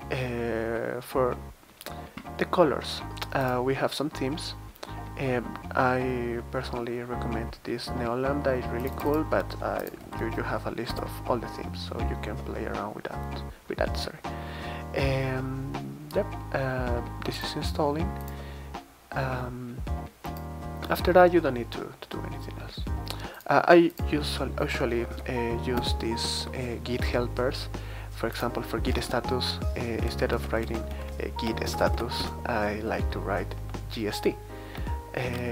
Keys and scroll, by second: 9.4 super+c, 10.0 super+v, 10.9 Return, 25.1 super+v, 25.7 Return, 29.1 alt+Left, 29.6 alt+Left, 29.7 alt+Left, 30.3 alt+Left, 30.6 alt+Left, 30.9 alt+Left, 31.6 BackSpace, 31.8 BackSpace, 31.9 BackSpace, 32.2 Return.